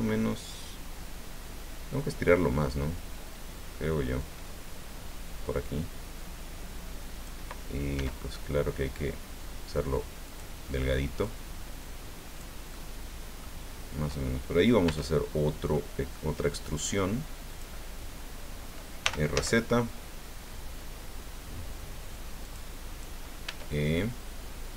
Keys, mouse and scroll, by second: 4.2-7.4 drag, 7.9 s, 10.2 click, 11.2-12.6 drag, 12.7 middle click, 14.8 e, 17.5 click, 19.0 r, 19.3 z, 22.4 click, 23.4 e.